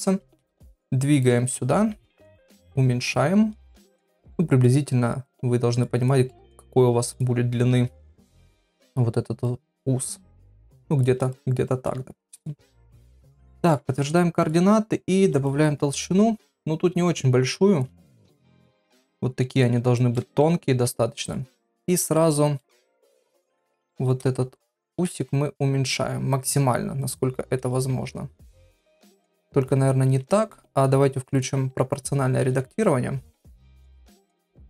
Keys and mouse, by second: 0.0 g, 1.7 KP_1, 2.5 s, 3.2 g, 4.3 middle click, 5.3 click, 6.2 middle click, 7.1 click, 8.2 KP_1, 9.4-11.1 drag, 11.3 shift+click, 11.6 shift+middle click, 12.3 click, 12.8 click, 13.4 ctrl+a, 14.4 click, 15.5-17.8 shift+drag, 18.1 click, 19.5 click, 19.9 shift+middle click, 20.6 Tab, 21.8 shift+middle click, 22.1 middle click, 22.6 shift+middle click, 23.1 shift+middle click, 24.8 alt+s, 27.9 Tab, 29.8 ctrl+z, 30.2 ctrl+z, 31.3 click, 32.4 alt+s.